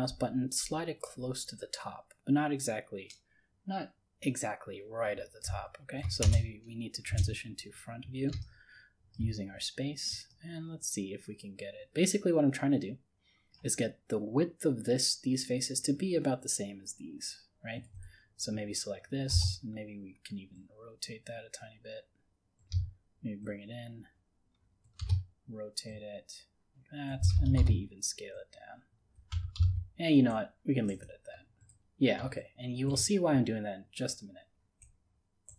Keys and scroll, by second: 29.5 ctrl+z.